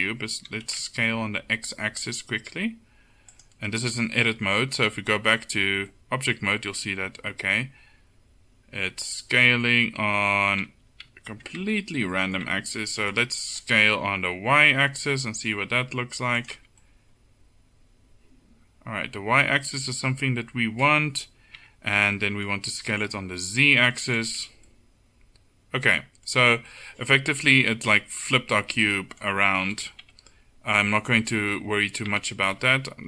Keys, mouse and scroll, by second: 0.5 s, 5.0 Tab, 6.4-8.1 middle drag, 10.1 Tab, 10.8 ctrl+z, 11.2 ctrl+z, 11.7 Tab, 12.5 Tab, 13.8 s, 16.6 Tab, 19.0 middle click, 19.9 middle click, 20.1 middle click, 20.8 middle click, 21.7 Tab, 22.9 s, 24.5 Tab, 26.8 middle click, 29.8 KP_7, 30.1 Tab, 32.3 ctrl+z, 32.7 ctrl+z, 32.9 ctrl+z.